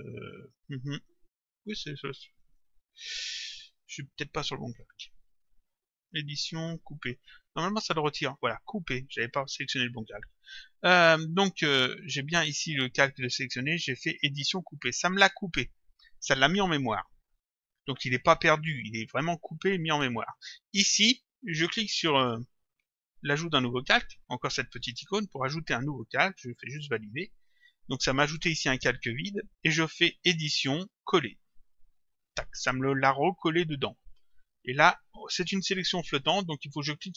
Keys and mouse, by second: 2.4 click, 4.5 click, 6.0 click, 7.5 click, 18.7 click, 24.9 click, 26.6 click, 30.3 click, 32.2 click.